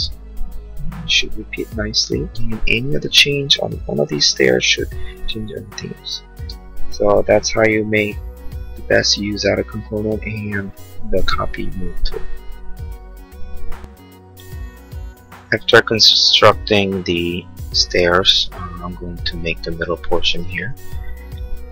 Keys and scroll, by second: 0.0 Return, 2.3 space, 5.6 Escape, 6.4 space.